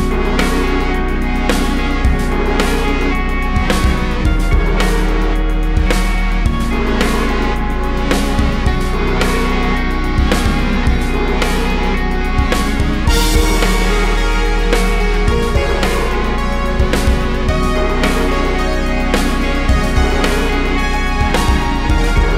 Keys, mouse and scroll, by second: 0.3-0.9 drag, 2.6 click, 4.3 click, 5.2 shift+d, 6.5 click, 8.1 drag, 8.9-10.1 ctrl+shift+drag, 10.1 click, 10.7 click, 11.8 click, 14.3-20.1 drag, 21.7 click.